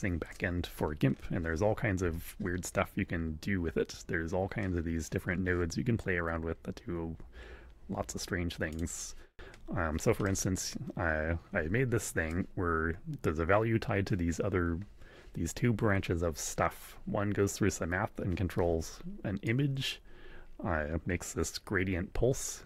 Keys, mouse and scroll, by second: 2.0 shift+a, 8.7 click, 10.2-12.5 drag, 19.4-22.6 drag.